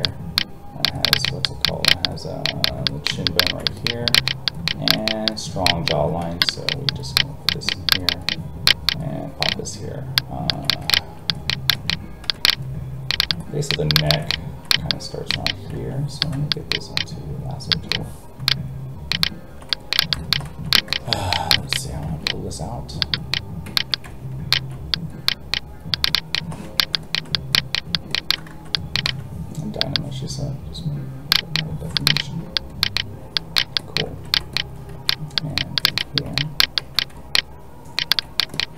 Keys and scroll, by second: 6.2 ctrl+z, 15.7 ctrl+z, 22.0 alt+a, 28.5 ctrl+z, 34.9 alt+a.